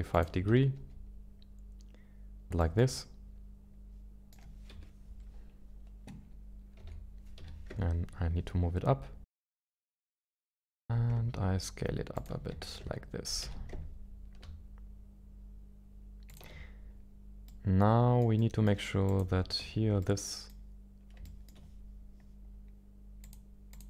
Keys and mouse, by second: 0.1 ctrl+click, 0.7 g, 2.6-4.5 shift+middle drag, 4.7 KP_1, 6.7 g, 7.3 z, 10.2 s, 10.8 z, 12.1 ctrl+click, 12.5 g, 12.8 y, 13.4 z, 17.5-18.3 middle drag, 18.4-18.7 middle drag, 19.0 click, 19.6 Tab, 20.0 middle click, 21.4 shift+middle click, 23.2 click, 23.7 click.